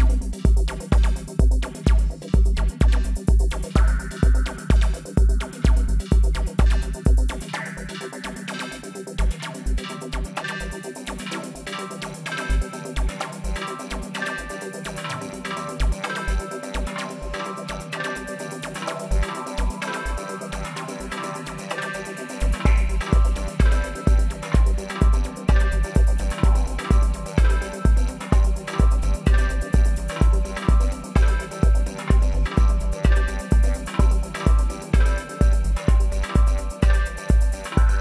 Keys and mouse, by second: 0.6 middle click, 0.6 g, 2.6 g, 4.7 g, 5.9 n, 7.6-10.0 right drag, 10.0-11.8 middle drag, 11.0 z, 11.8-14.9 right drag, 13.6 g, 15.8 z, 16.9 g, 18.8 g, 21.3 middle click, 22.2-24.2 middle drag, 24.8 middle click, 25.3-26.4 middle drag, 26.4-28.1 drag, 28.1-29.5 middle drag, 29.9 middle click, 30.8-34.1 right drag, 33.3 w, 36.0 w, 36.8 right click, 37.3-38.0 middle drag, 37.8 alt+s.